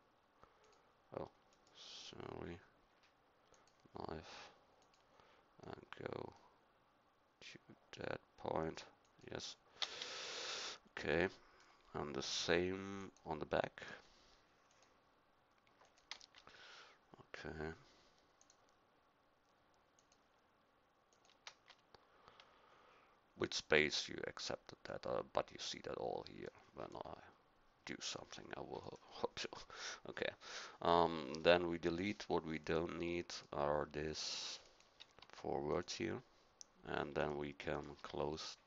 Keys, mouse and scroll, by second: 3.5 click, 24.0 middle click, 30.8 middle click, 31.9 click, 32.6-35.2 right drag, 35.2 x.